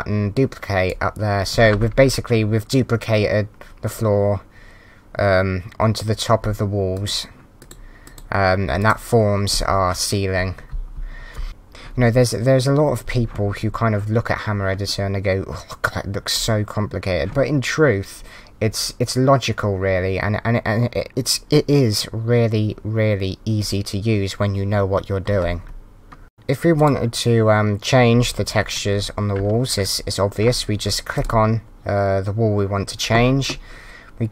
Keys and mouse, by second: 6.9 click, 10.7 d, 26.7 click, 31.1 click.